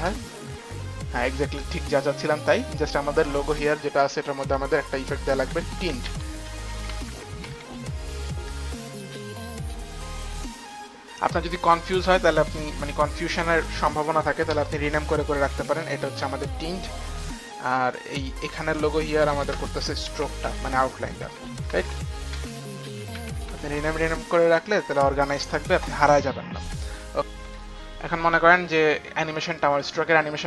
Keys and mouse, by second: 1.8 click, 4.1 click, 4.1 space, 4.7 click, 5.2 click, 6.0-8.0 typing, 6.5 click, 7.5 click, 9.0 click, 9.0 t, 12.6 click, 14.4 Return, 15.6-17.2 typing, 15.8 click, 16.0 click, 17.8 click, 18.4 click, 19.3-23.9 typing, 19.5 click, 20.0 click, 20.2 click, 20.8 click, 21.0 click, 21.2 click, 25.1-25.9 typing, 29.8 click.